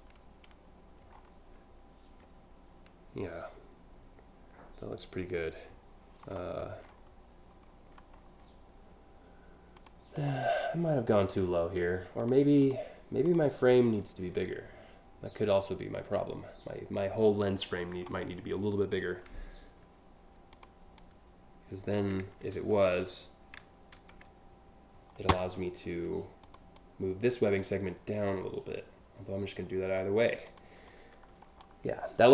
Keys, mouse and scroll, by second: 0.7 alt+scroll down 1, 6.5 alt+scroll up 2, 7.3 alt+scroll down 1, 7.7 scroll up 1, 7.9 scroll down 1, 9.4 click, 9.7 click, 11.8 click, 12.2 click, 12.9 click, 20.2 click, 20.6-21.6 drag, 23.6 ctrl+z, 26.1 click, 26.4-29.6 drag, 30.1 click, 31.1-31.8 scroll down 4.